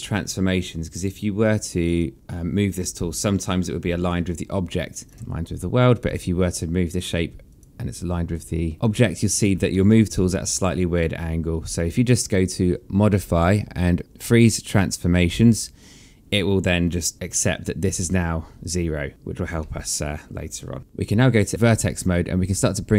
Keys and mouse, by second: 2.0 click, 5.1 click, 8.7 click, 9.9 alt+middle click, 13.3 click, 19.1 alt+middle click, 20.9 right click, 22.6 click.